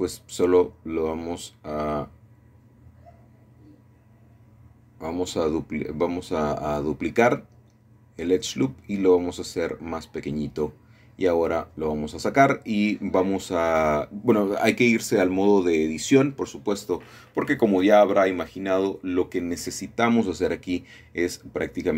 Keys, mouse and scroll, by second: 2.2 middle click, 3.7 shift+d, 4.1 Escape, 4.9 d, 5.6 Escape, 5.6 d, 9.2 shift+click, 13.1 y, 16.4-17.4 shift+drag, 19.2-20.2 middle drag, 20.8 s.